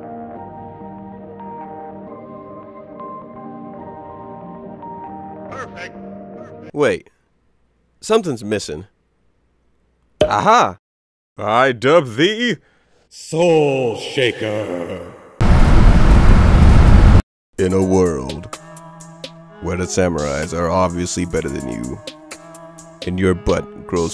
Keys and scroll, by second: 0.1 ctrl+alt+space, 1.6 ctrl+s, 2.7 ctrl+space, 3.7 ctrl+z, 3.8 ctrl+space, 4.7 ctrl+space, 5.0 ctrl+z, 5.6 ctrl+z, 6.1 ctrl+alt+space.